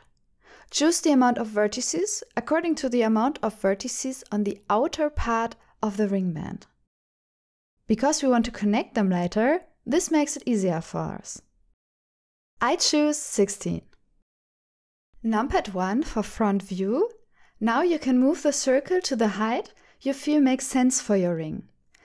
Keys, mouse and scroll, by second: 2.1 shift+middle click, 5.1-7.6 drag, 8.4 click, 9.1 shift+middle click, 11.6 click, 12.2 click, 13.3 click, 15.9 KP_1, 17.7 ctrl+alt+shift+f, 21.4 g.